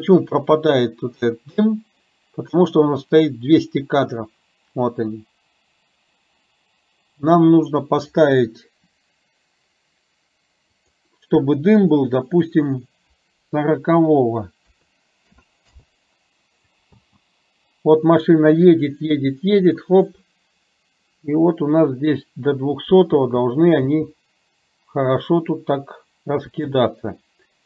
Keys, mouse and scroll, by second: 10.7-15.9 drag, 17.0 space, 23.1 space, 24.0 space, 26.6 space.